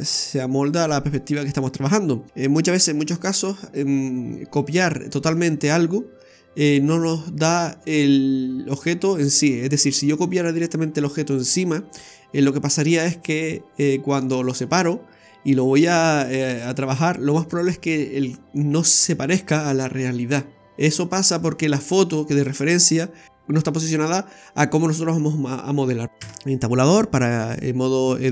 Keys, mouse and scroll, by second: 26.0 f, 26.3 Tab.